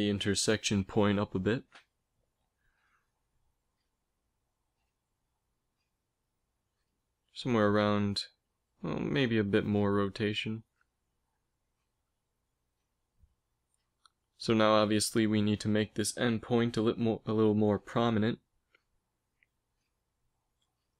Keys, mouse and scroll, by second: 9.1 r, 12.8 Tab, 13.9 a, 15.6 b, 16.0 click, 16.2 a, 16.4 a, 16.6 b, 18.0 g.